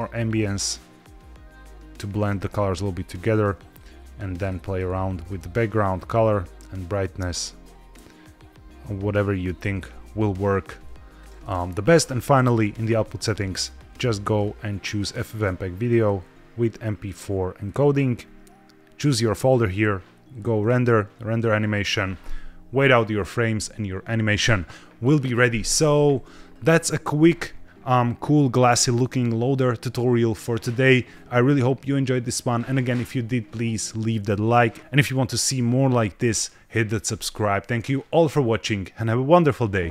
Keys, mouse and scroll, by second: 2.6 click, 3.6 click, 4.3 click, 5.1 click, 12.2 click, 13.3-14.2 scroll down 2, 14.2-14.8 drag, 15.8 click, 16.1-16.4 scroll down 1, 16.9-17.6 drag, 18.1-18.9 scroll up 2, 20.5-21.4 drag.